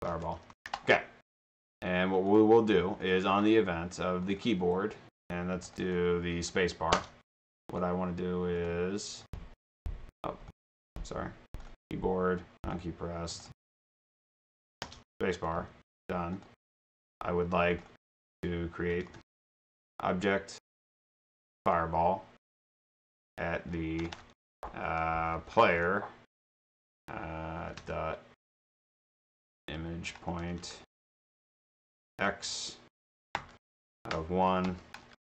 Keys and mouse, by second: 0.0-0.9 typing, 1.5 drag, 2.3 click, 3.3 click, 4.3 click, 5.7 click, 5.9 click, 6.5 click, 7.0 space, 7.7 click, 8.6 click, 9.3 click, 10.5 click, 11.5 click, 11.7 click, 12.6 click, 13.3 click, 14.8 space, 15.4 drag, 16.4 click, 16.8 click, 17.7 click, 18.6-19.7 typing, 19.7 click, 19.8 click, 20.7 click, 21.5 click, 22.7 click, 23.2 click, 24.0-26.2 typing, 29.6-32.1 typing, 34.8 -.